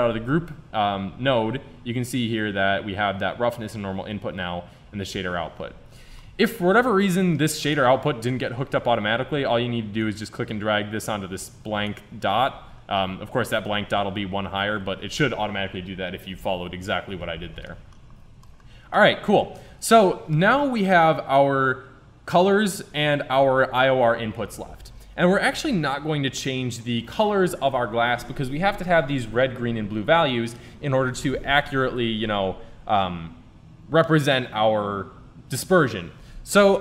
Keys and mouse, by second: 5.2 Tab, 9.6 middle click, 13.2-15.0 drag.